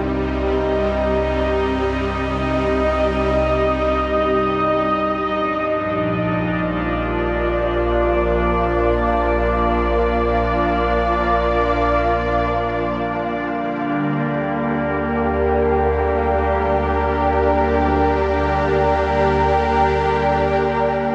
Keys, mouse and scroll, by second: 1.8 ctrl+g, 2.2 z, 2.5 click, 2.7 space, 2.8 click, 2.9 z, 3.8 click, 5.1-7.0 alt+drag, 7.0-10.2 drag, 10.2 shift+Left, 12.7 shift+click, 13.7 ctrl+g, 14.8 shift+click, 17.8 ctrl+z, 17.8 typing, 18.2 click.